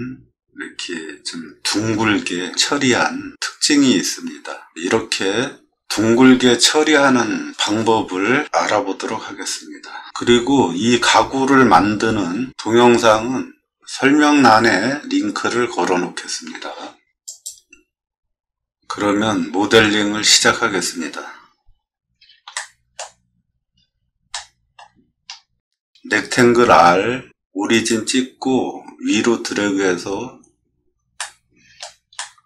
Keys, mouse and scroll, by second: 17.4 click, 22.5-22.9 shift+middle drag, 23.3 middle click, 23.9 middle click, 24.3-24.7 shift+middle drag, 25.1 scroll up 1, 26.7 r, 27.7 click, 31.2 middle click, 32.1-32.4 shift+middle drag.